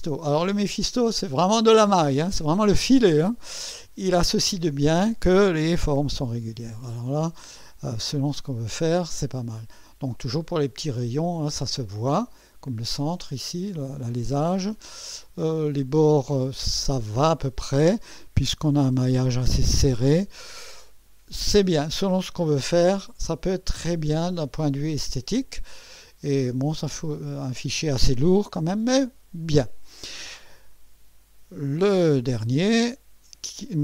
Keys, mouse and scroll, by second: 1.3 scroll up 1, 3.9 scroll down 2, 6.4-7.4 drag, 8.1 scroll up 2, 11.8-16.0 drag, 16.9 scroll up 1, 17.2 right click, 20.9-22.9 drag, 23.1-24.0 scroll down 4, 24.6-26.0 drag, 26.3-27.2 right drag, 27.4 scroll up 1, 28.4-29.1 right drag, 29.5 scroll down 2.